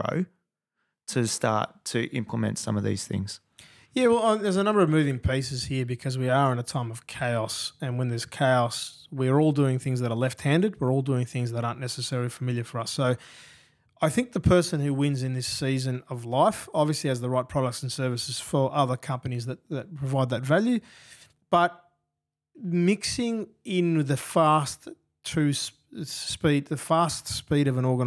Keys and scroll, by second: 1.9 super+[, 3.4 F7.